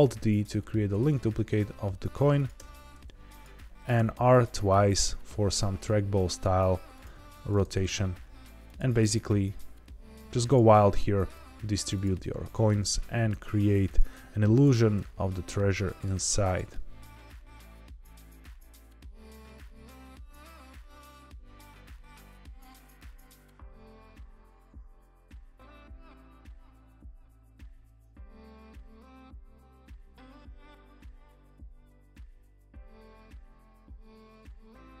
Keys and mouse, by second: 1.3 g, 1.4 z, 2.3 click, 2.5 g, 3.2 click, 3.9 r, 4.1 r, 6.9 click, 7.3 alt+d, 7.6 shift+z, 8.6 click, 8.7 r, 8.9 r, 10.4 click, 10.6 middle click, 11.3 g, 11.9 click, 12.1 middle click, 13.2 alt+d, 13.8 click, 13.9 g, 14.0 z, 14.5 click, 14.7 r, 14.9 r, 15.8 click, 16.0 g, 16.1 z, 16.4 click, 16.6 middle click, 17.2 g, 17.5 click, 17.6-18.0 middle drag, 18.1 alt+d, 18.6 click, 18.6 middle click, 19.3 middle click, 19.5-22.1 typing, 19.7 click, 20.0 click, 20.0 middle click, 20.2 alt+d, 20.4 click, 20.9 click, 21.0 middle click, 21.7 click, 21.7 middle click, 22.1 click, 22.2 middle click, 22.6 middle click, 22.7 alt+d, 22.9 click, 23.2-24.5 typing, 23.7 click, 24.0 click, 24.1 middle click, 24.5 click, 24.7 click, 24.8 middle click, 25.3 alt+d, 25.5 click, 25.6 r, 25.6 r, 26.0 click, 26.1 middle drag, 26.4 g, 26.6 click, 26.7 middle click, 26.8 middle click, 27.1 middle click, 27.9-28.4 middle drag, 28.6 click, 28.7 middle click, 29.0 alt+d, 29.1 click, 29.2-30.7 typing, 29.5 click, 29.9 click, 30.2 click, 30.3-30.6 middle drag, 30.8 click, 31.2 drag, 31.3 middle click, 31.5 shift+middle drag, 33.1 alt+d, 33.2 click, 33.7 alt+g, 33.8 alt+r, 34.1-35.0 typing.